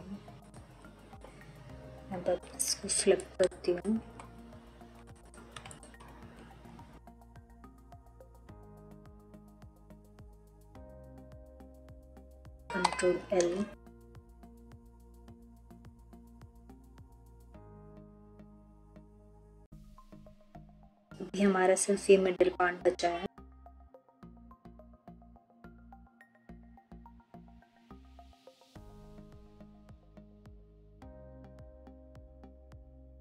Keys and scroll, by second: 12.7 ctrl+l, 24.6 3, 28.9 3, 31.9 3.